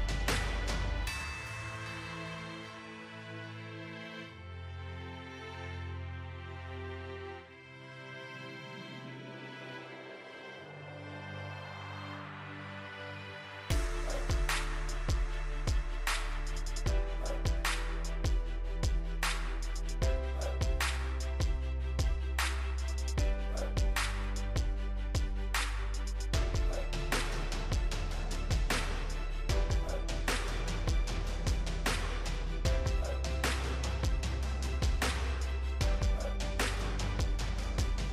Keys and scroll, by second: 26.1 ctrl+j.